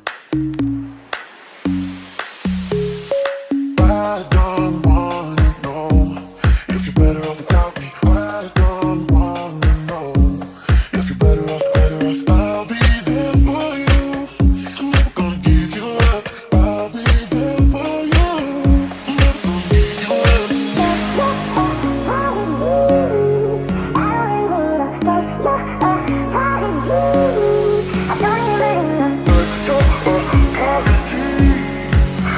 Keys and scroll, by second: 0.0-0.4 typing, 3.4-11.4 typing, 13.2-19.4 typing, 20.7 q, 26.3-30.2 typing, 31.2-32.3 typing.